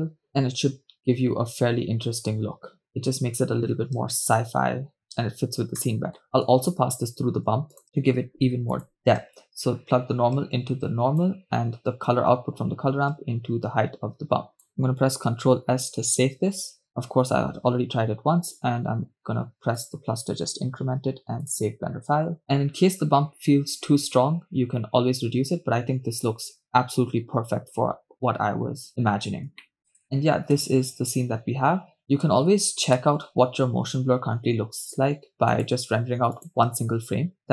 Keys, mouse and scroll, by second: 5.8-6.5 scroll down 3, 5.8 middle click, 6.7 shift+a, 9.0 click, 9.6-11.4 drag, 12.2-14.8 drag, 15.9 ctrl+s, 28.9 KP_0, 29.2 scroll down 3, 29.8 shift+space, 30.1 shift+space, 30.8 shift+space, 32.6 shift+space, 33.3 shift+space, 35.6-37.5 drag.